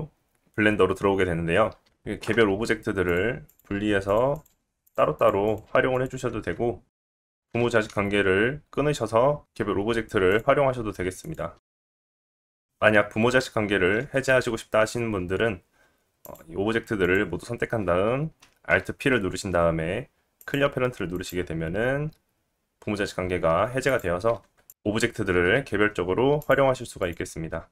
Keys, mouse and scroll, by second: 1.8 click, 1.8 g, 2.4 g, 3.5 click, 3.7 g, 4.3 click, 5.2 click, 5.6 g, 5.9-7.4 middle drag, 7.4 shift+click, 7.5 alt+p, 12.0 click, 12.5 g, 15.1 ctrl+z, 16.2 click, 17.0 shift+click, 17.3-18.7 shift+drag, 18.7 alt+p, 21.1 click, 23.9 drag, 24.3 g, 25.0 click, 25.2 g, 25.6-27.0 drag, 26.0 middle click, 26.0 right click.